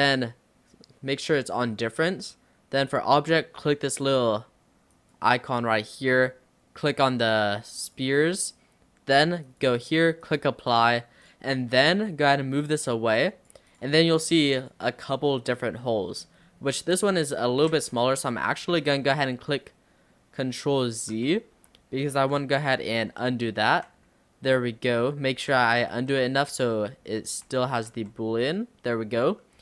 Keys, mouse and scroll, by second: 5.0 click, 9.5-10.8 drag, 11.3 click, 11.6-12.0 middle drag, 12.0-12.6 scroll down 4, 12.9 click, 13.7 click, 14.0 scroll up 2, 14.2-14.7 middle drag, 14.7 click, 14.9 scroll up 3, 15.2-16.4 middle drag, 16.4-16.8 scroll up 3, 16.8-18.3 middle drag, 18.3 scroll down 3, 18.9 ctrl+z, 21.2 ctrl+x, 21.6 ctrl+x, 22.4 ctrl+x, 23.0 ctrl+z, 23.4 ctrl+z, 25.4 ctrl+z, 26.0 ctrl+z, 26.5 click, 27.5 ctrl+z, 28.0 ctrl+z.